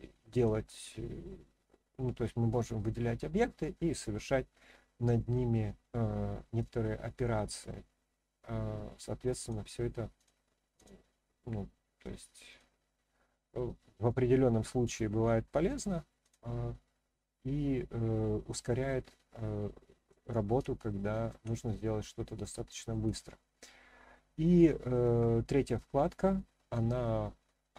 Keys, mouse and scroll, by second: 0.3-9.0 drag, 9.3 click, 10.1 click, 10.7 click, 12.5-16.0 drag, 16.2 click, 18.6-20.1 middle drag, 20.7-21.3 shift+middle drag, 21.6-22.3 middle drag, 22.5-22.9 shift+middle drag.